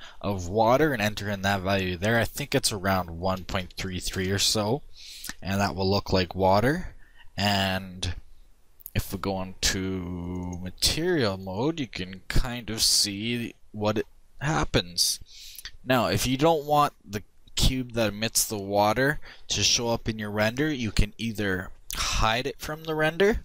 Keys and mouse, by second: 0.4-2.1 drag, 2.1 3, 7.3-10.7 drag, 21.2-23.4 drag.